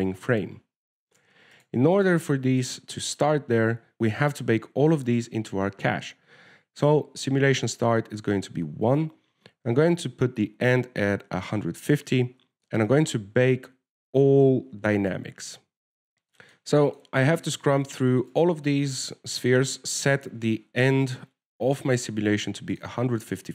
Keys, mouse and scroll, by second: 1.5-2.4 scroll down 1, 2.4 right click, 2.4 scroll down 3, 2.9 shift+right click, 3.4 right click, 3.6 middle click, 4.0 click, 10.3 click, 13.7 scroll down 4, 13.9 shift+middle click, 15.2 ctrl+s, 16.0 alt+a, 16.0 click, 16.8 click, 17.6 shift+middle click, 18.2 right click, 18.7 shift+middle click, 19.1 right click, 19.6 right click, 21.3 click.